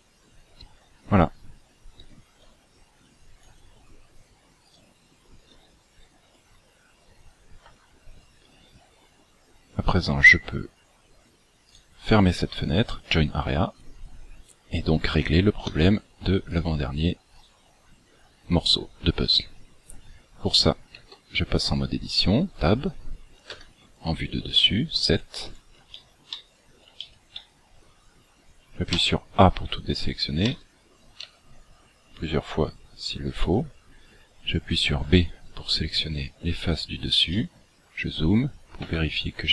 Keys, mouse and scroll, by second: 15.6 Escape, 16.4 right click, 17.3 right click, 21.0 Tab, 21.6-22.0 scroll up 4, 23.6 KP_7, 25.0-25.5 scroll up 10, 25.8 shift+middle click, 26.4-27.0 scroll up 2, 27.0 shift+middle click, 27.6 scroll up 2, 28.4-28.9 scroll down 2, 28.9 a, 30.4 a, 31.2 a, 34.8 b, 36.8 scroll up 3, 37.2 shift+middle click, 38.8 b.